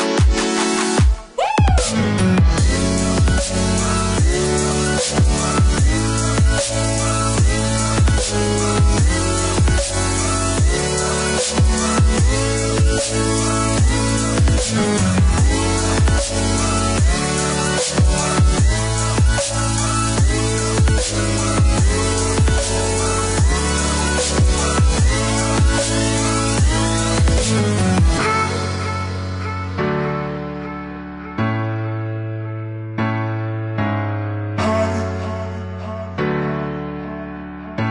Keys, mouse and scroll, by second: 1.6 click, 3.6 click, 4.9 click, 5.3 Escape, 7.4 click, 10.0 click, 13.5 click, 14.3 Escape, 15.1 click, 16.3 click, 17.3 click, 18.5 KP_2, 18.8 KP_0, 19.1 KP_Enter, 19.7 Escape, 20.9 click, 21.5 click, 21.9 space, 22.6 click, 26.6 click, 30.1 click, 32.0 click, 33.3 click, 34.2 KP_1, 34.5 KP_5, 34.9 KP_Enter, 36.6 click.